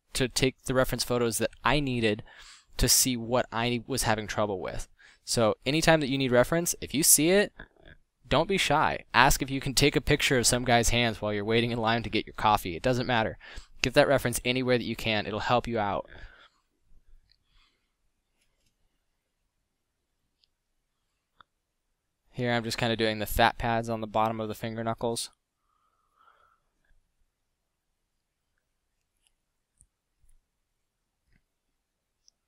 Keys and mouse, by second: 1.5 f, 7.1-8.6 drag, 10.1-10.5 drag, 10.7 click, 14.9 f, 19.7 f, 20.5 f, 32.0 f.